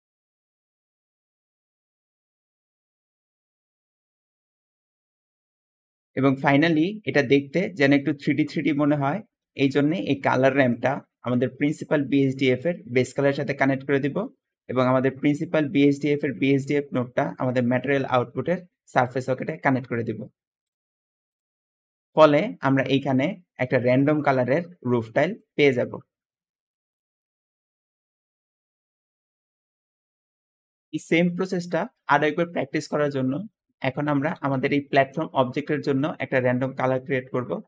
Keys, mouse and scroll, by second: 6.0 middle click, 6.0-6.6 scroll down 4, 11.4-13.1 drag, 13.6 middle click, 16.9-19.2 drag, 34.2 g, 34.2 g.